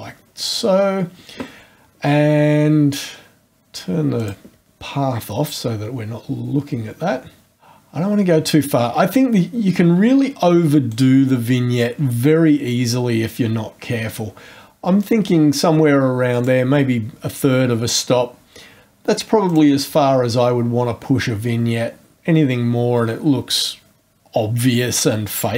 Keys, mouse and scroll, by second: 4.2 click, 7.6 click, 15.0 click, 19.4 click.